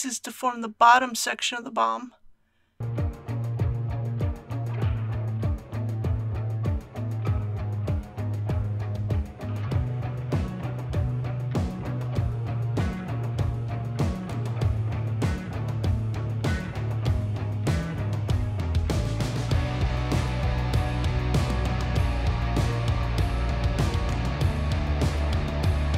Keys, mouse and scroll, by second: 0.5 KP_1, 4.2 e, 8.4 click, 8.8 e, 11.1 click, 11.6 s, 12.0 shift+z, 14.9 click, 24.1 shift+r.